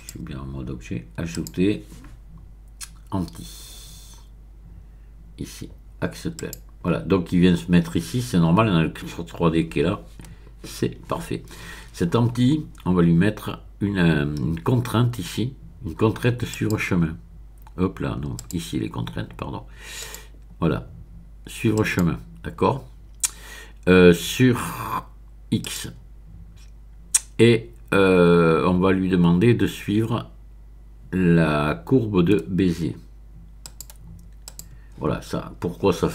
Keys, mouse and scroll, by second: 1.3 click, 6.3 click, 16.5 click, 18.3 click, 20.0 click, 21.7 click, 25.6 click, 33.6 click, 34.4 click.